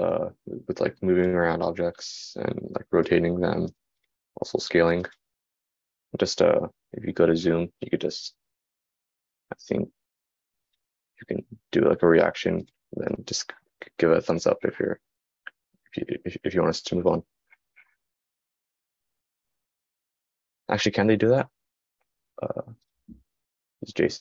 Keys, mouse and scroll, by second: 6.1-24.2 drag, 6.1-11.4 middle drag.